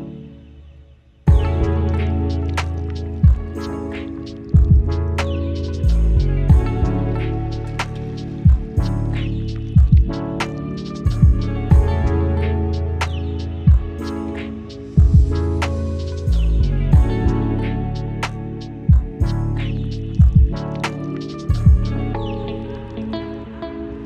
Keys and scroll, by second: 0.2 ctrl+z, 0.7 space, 2.4 Delete, 2.9 ctrl+d, 8.2 Delete, 8.5 ctrl+d, 13.9 ctrl+shift+g, 14.7 ctrl+z.